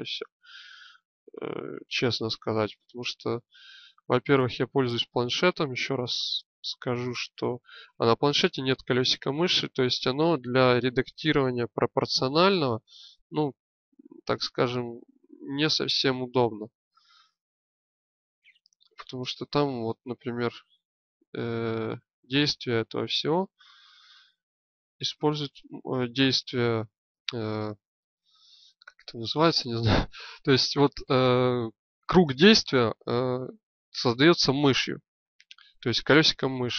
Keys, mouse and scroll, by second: 0.9-2.7 drag, 4.2-5.7 middle drag, 12.0-14.7 drag, 14.7-17.2 middle drag, 17.2 click, 20.6 middle click, 28.2 middle click.